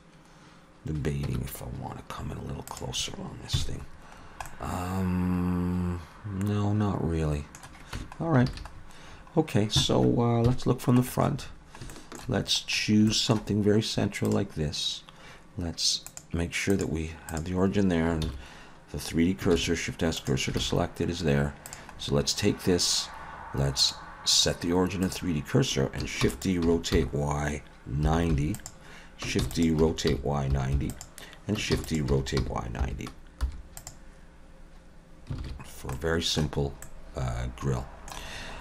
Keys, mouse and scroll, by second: 1.3 Tab, 2.7 click, 3.6 KP_Decimal, 4.2 scroll down 2, 4.5 middle click, 8.0 Tab, 8.2-10.2 scroll down 8, 8.5 alt+a, 10.5 scroll down 1, 10.5 KP_1, 11.1-11.8 scroll down 6, 11.9 shift+middle click, 12.4-13.1 scroll up 6, 13.1 shift+middle click, 14.3 click, 16.1 click, 18.3 shift+s, 19.5 shift+s, 20.6 alt+a, 21.7 click, 22.0-22.7 scroll down 4, 23.8 click, 26.2 shift+d, 26.6 r, 29.4 shift+d, 29.8 r, 31.7 shift+d, 32.1 r, 35.4 alt+a, 35.7-36.6 scroll down 3, 35.9 middle click, 36.6-37.7 scroll up 2, 36.8 middle click, 38.4-38.6 scroll up 2.